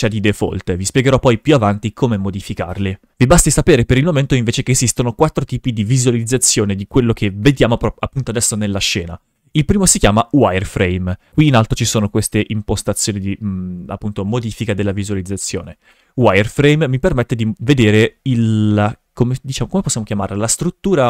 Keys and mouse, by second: 3.6 shift+f, 10.0 click, 15.7 shift+f.